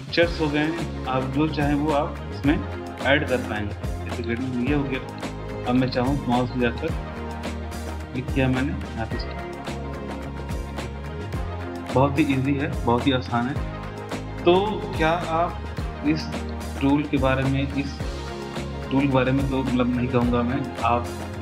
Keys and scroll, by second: 15.6 Delete, 17.6 Delete.